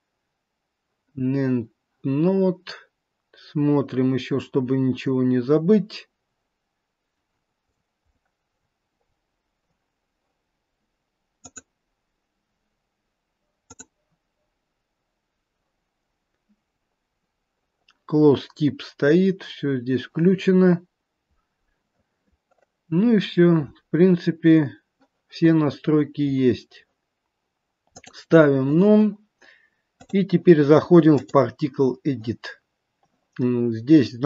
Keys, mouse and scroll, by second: 3.3-4.5 scroll up 5, 4.5-6.0 scroll up 5, 7.2-11.3 scroll down 19, 12.5 click, 14.7 click, 15.9-18.5 scroll down 9, 18.5-21.0 scroll down 6, 23.9-25.7 scroll up 3, 25.7-27.3 scroll up 11, 28.1 click, 29.9 click.